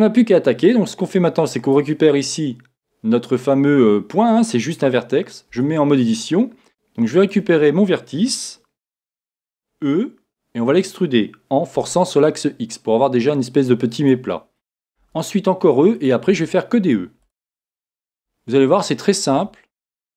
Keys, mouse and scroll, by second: 0.0-1.8 drag, 5.8 Tab, 6.7 click, 7.3 b.